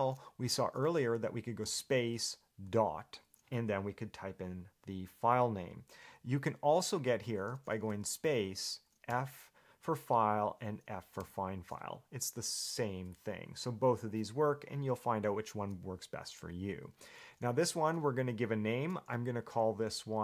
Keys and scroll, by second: 7.2 Escape.